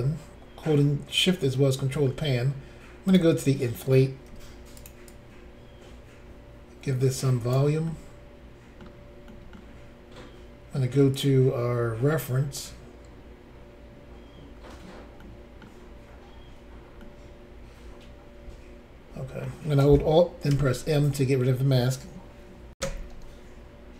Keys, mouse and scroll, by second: 3.0 click, 4.3 f, 4.8 click, 4.8 click, 5.1 click, 7.9 middle click, 9.3 middle click, 11.1 click, 11.2 click, 12.0-12.6 scroll up 4, 14.5-15.2 scroll down 1, 15.2 middle click, 15.8-16.3 scroll down 2, 17.0 middle click, 17.0 scroll down 1, 20.5 alt+m, 22.8 Insert.